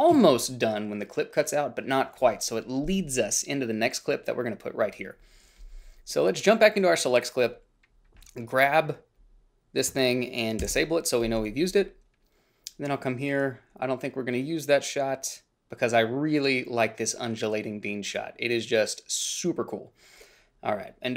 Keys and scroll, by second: 10.8 ctrl+b.